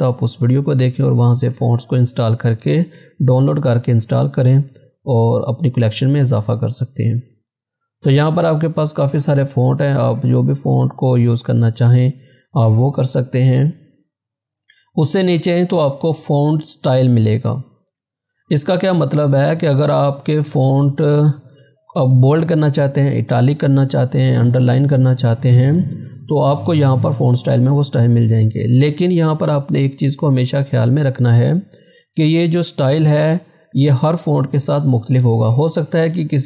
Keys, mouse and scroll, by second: 5.6 scroll down 1, 10.2 scroll down 1, 12.8 click, 19.0 click, 27.2 click.